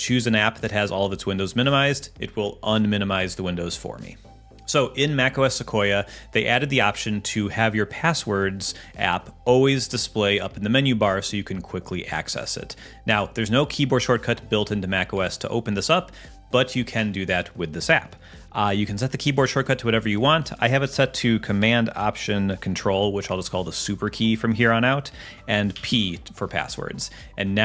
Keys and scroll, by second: 25.7 ctrl+alt+super+p.